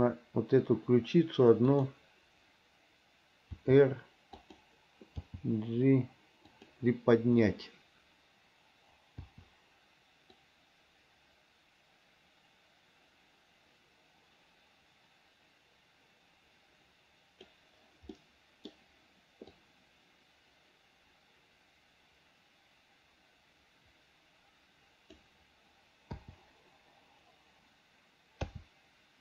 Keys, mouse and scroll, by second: 3.8 r, 5.4 g, 9.5 i, 10.7-17.8 drag, 18.3 middle click, 19.8-25.4 drag, 28.7 a.